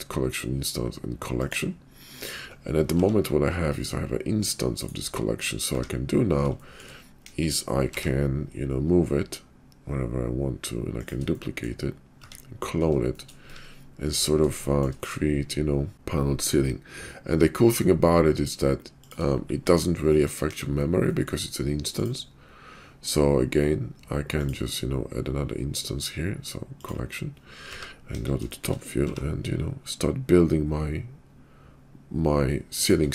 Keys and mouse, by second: 3.0 g, 5.4 drag, 5.8 `, 6.7 middle click, 7.3 KP_5, 7.9 g, 11.4 middle drag, 12.4 `, 12.8-13.3 shift+middle drag, 13.3 `, 13.6 `, 14.6 shift+middle drag, 15.9 shift+g, 19.3-20.5 middle drag, 20.5 KP_5, 21.1 middle drag, 22.0 click, 24.4-26.9 drag, 28.1 KP_5, 29.1 g.